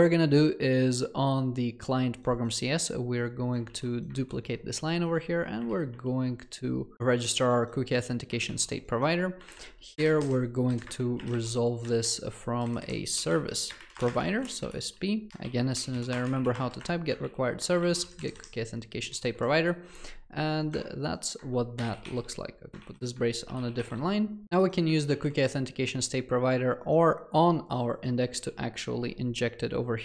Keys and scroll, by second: 3.7 ctrl+c, 5.6 ctrl+v, 5.9 ctrl+BackSpace, 8.5 ctrl+c, 15.3 ctrl+BackSpace, 17.8 ctrl+v, 22.0 ctrl+alt+l, 23.6 ctrl+alt+l, 25.1 ctrl+c.